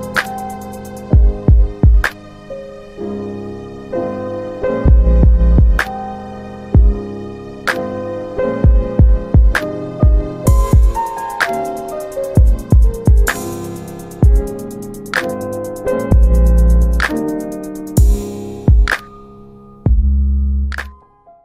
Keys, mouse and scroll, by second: 3.3-3.8 scroll down 2, 4.9 ctrl+alt+middle click, 5.6 alt+middle click, 6.2 middle click, 10.1 middle click.